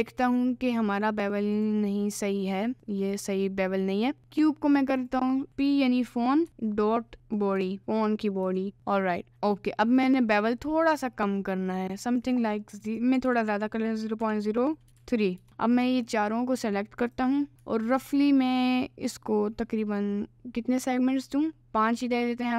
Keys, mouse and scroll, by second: 0.3 click, 1.5 click, 4.9 click, 5.2-8.7 drag, 10.0-12.3 drag, 12.8 click, 15.7 shift+click, 17.0 click, 17.9 ctrl+b.